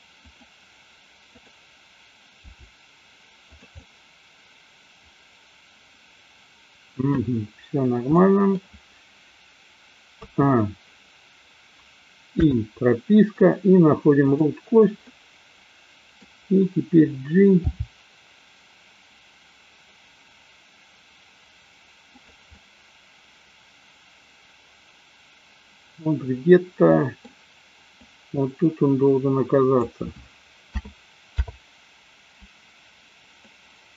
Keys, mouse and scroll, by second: 1.3 click, 2.5 g, 3.8-7.0 middle drag, 8.2-8.5 middle drag, 10.3 a, 12.5 i, 14.3 click, 15.0-16.3 middle drag, 17.7 g, 22.5-27.3 middle drag, 28.0-29.9 drag, 30.8 a, 31.4 i, 33.8-33.9 drag.